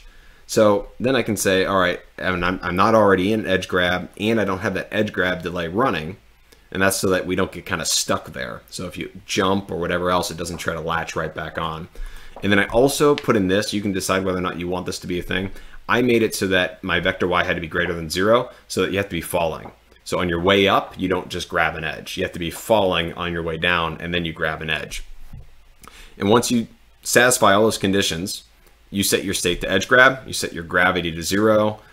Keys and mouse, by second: 1.3 click, 12.1 click, 29.3 click.